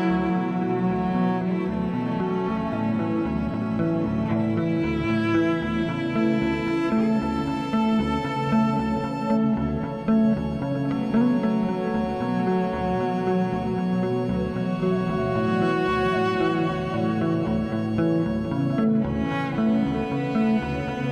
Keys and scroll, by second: 1.0 3, 10.3 3, 11.7 3, 20.7-21.1 typing.